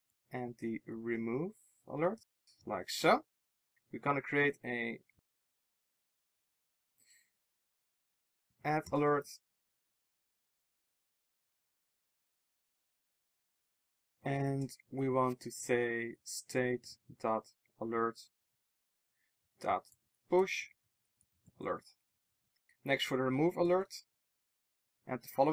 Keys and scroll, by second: 2.2 Return, 2.8 alt+super+l, 6.8 shift+Tab, 9.1 Return, 12.5 ctrl+alt+shift+Right, 22.5 alt+super+l, 23.3 super+c, 24.6 super+v.